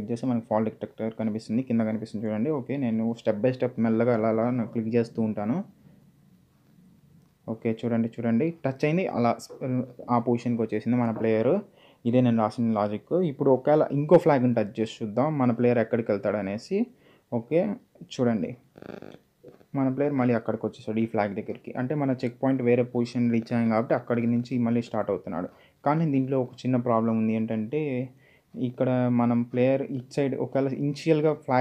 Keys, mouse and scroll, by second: 0.2 click, 2.1 click, 11.7 click, 13.5 d, 14.0 space, 15.9-17.2 typing, 20.8-21.5 typing, 23.1 click, 27.0 click, 27.7-31.6 typing.